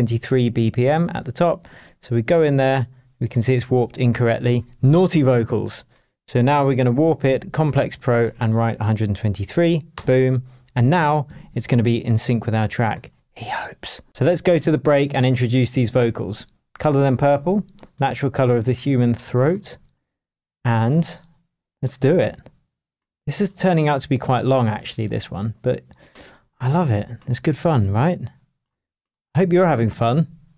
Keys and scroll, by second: 10.9 Return, 11.3 shift+Tab.